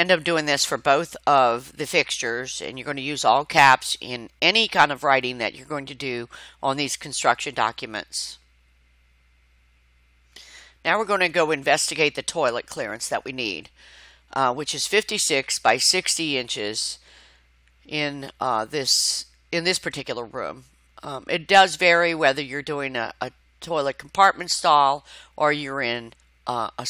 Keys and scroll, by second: 0.0-0.5 typing, 0.2 Caps_Lock, 1.9 r, 2.7 Return, 3.1 s, 20.3 Tab, 24.7 Escape.